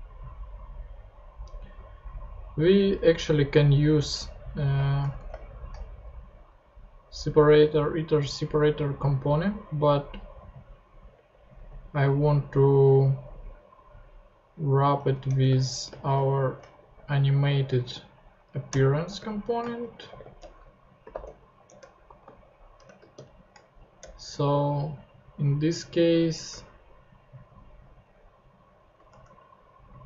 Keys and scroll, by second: 5.1 shift+Return, 5.5 shift+s, 15.2 Return, 15.6-17.6 typing, 18.7 Return, 19.2 shift+Return, 19.6-23.1 typing, 22.0 Right, 24.0 shift+Return, 24.6 Return, 28.0 alt+shift+Up, 29.1 alt+shift+Tab, 29.9 shift+Tab.